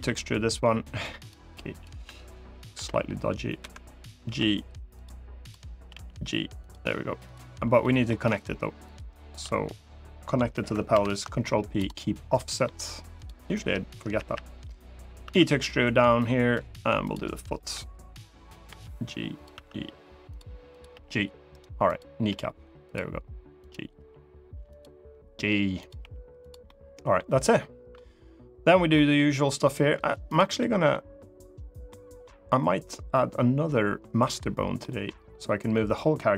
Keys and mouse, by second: 0.9 click, 2.5 p, 4.0 g, 4.7 click, 5.2 click, 5.6 g, 6.3 click, 7.0 click, 7.5 middle click, 10.7 ctrl+p, 12.1 middle click, 13.0 click, 13.9 KP_1, 15.0 e, 16.8 click, 17.3 KP_3, 18.4 g, 19.1 click, 19.3 e, 20.0 click, 20.5 click, 20.6 g, 21.3 right click, 22.0 g, 22.6 click, 23.4 click, 23.7 g, 24.4 click, 25.6 click, 25.7 g, 26.1 click, 26.4 middle click, 27.2 middle click, 28.7 middle click, 30.1 click, 30.3 middle click, 31.6 middle click, 31.9 middle click, 34.0 middle click, 34.6 middle click.